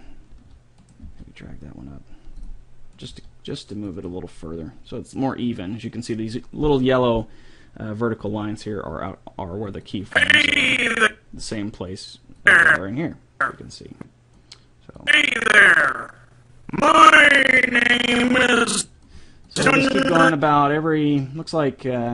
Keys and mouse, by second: 0.4 right click, 0.5 a, 1.2 g, 3.0 right click, 3.3 g, 9.9-11.7 drag, 12.4-14.3 drag, 15.0-16.8 drag, 19.5-21.4 drag.